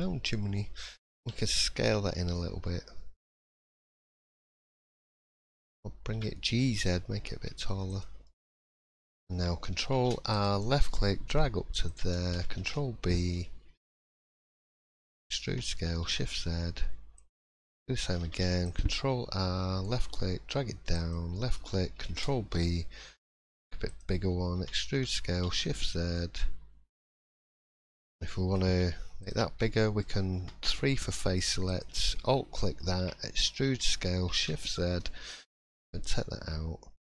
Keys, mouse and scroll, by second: 0.0 middle click, 1.2 s, 4.1-4.4 scroll down 3, 4.3 middle click, 4.8 scroll up 2, 5.1 shift+middle click, 6.1 g, 8.7 middle click, 8.7-9.1 scroll up 2, 9.9 ctrl+r, 12.5 ctrl+b, 15.1 e, 18.2 ctrl+r, 22.0 ctrl+b, 24.5 e, 27.6 middle click, 28.0 scroll up 1, 28.3 shift+middle click, 29.2 alt+click, 29.6 middle click, 30.4 3, 31.6 alt+click, 32.2 middle click, 33.3 e.